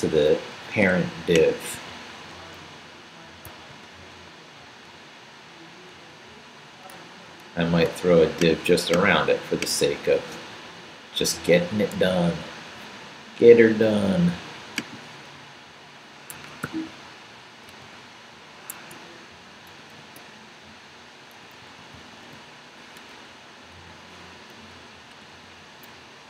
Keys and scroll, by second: 3.5 super+c, 11.9 super+c, 15.4 Up, 16.3 Escape, 16.6 o, 17.7 super+v, 18.7 super+Escape, 19.7 shift+., 23.1 BackSpace, 24.9 Left, 25.1 x, 25.9 Down.